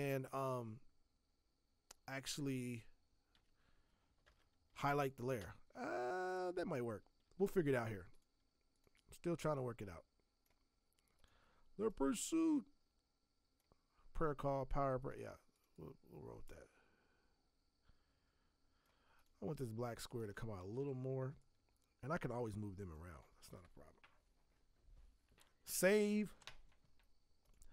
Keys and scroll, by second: 3.3 Escape, 4.2 alt+BackSpace, 7.5 ctrl+d, 20.6 ctrl+t, 26.2 ctrl+s.